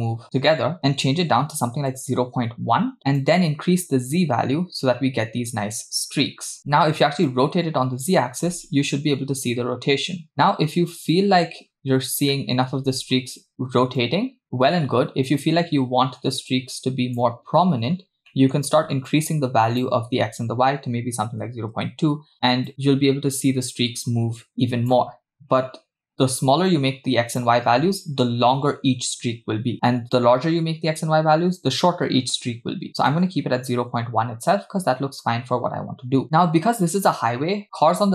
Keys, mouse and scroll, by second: 3.2-6.6 drag, 6.6 middle click, 6.6-7.3 scroll down 2, 7.3-11.1 drag, 11.7 scroll up 3, 12.3-12.7 shift+middle drag, 14.0-17.4 drag, 17.9-18.3 scroll up 2, 18.3 middle click, 19.1-21.9 shift+drag, 22.7-25.0 shift+drag, 26.4-33.2 shift+drag, 34.4-35.1 scroll down 2, 35.1-36.2 scroll down 4, 36.2 scroll down 1.